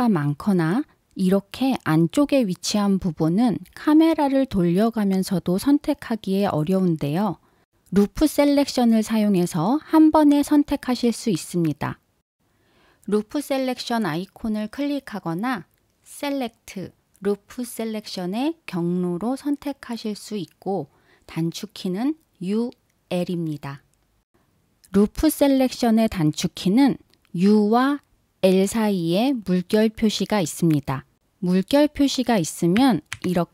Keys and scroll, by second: 12.1 super+z, 12.9 super+z.